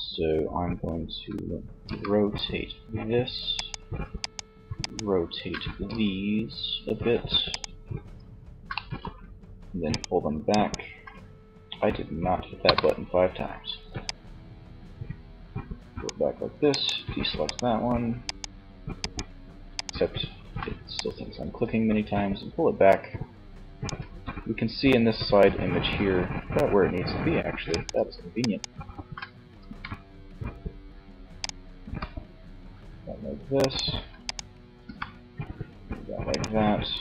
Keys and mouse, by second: 0.8 r, 2.8 click, 4.7 r, 7.7 click, 11.6 KP_3, 13.2-14.9 drag, 16.1-21.8 drag, 20.2 middle click, 23.3 z, 27.0-29.4 right drag, 28.9 g, 30.5-32.2 drag, 30.9 r, 32.9-34.2 drag, 33.9 g.